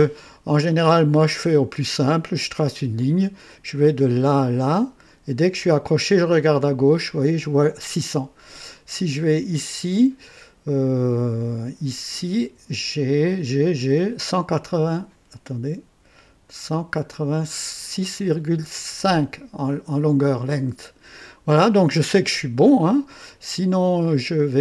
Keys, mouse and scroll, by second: 1.0 click, 2.9 click, 23.1 right click, 24.0 click.